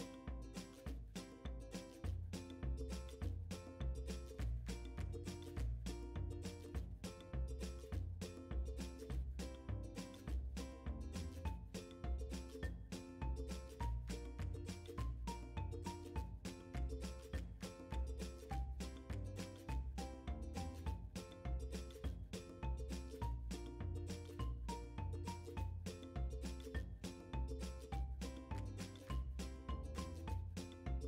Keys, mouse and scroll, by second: 1.3 middle click, 1.7 KP_3, 1.8-3.0 middle drag, 7.6 ctrl+KP_3, 9.2 click, 12.3 g, 14.7 click, 15.9-31.0 drag, 20.7 Return.